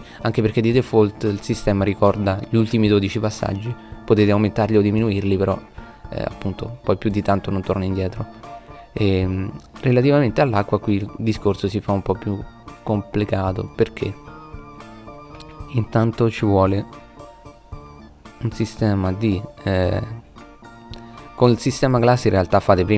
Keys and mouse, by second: 2.5 click, 13.9 shift+a.